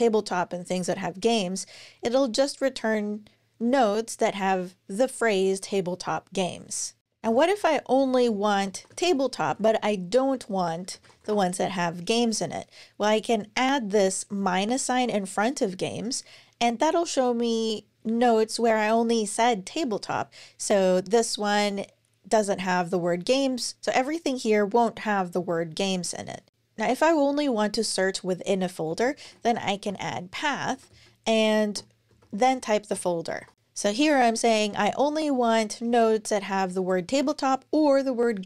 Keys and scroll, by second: 7.0 super+BackSpace, 7.8-11.5 typing, 28.5-33.2 typing.